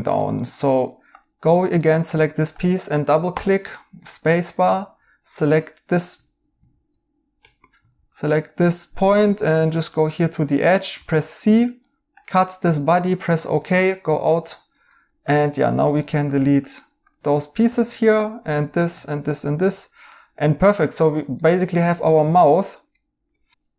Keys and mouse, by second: 3.7 right click, 4.5 a, 6.7 ctrl+z, 7.3 Escape, 9.9 right click, 9.9 a, 10.9 c, 11.5 right click, 13.3 right click, 15.8 Tab, 17.6 x, 18.0 x, 19.5 x, 19.8 right click, 20.4 right click, 21.3 right click.